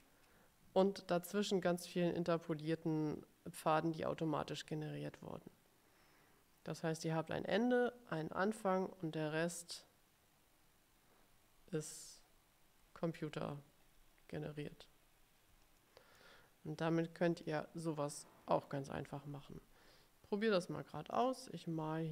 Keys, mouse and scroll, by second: 13.9-15.3 ctrl+scroll down 7, 15.9 middle click, 16.9 ctrl+scroll down 2, 17.7 click, 18.3 middle click, 21.3 click.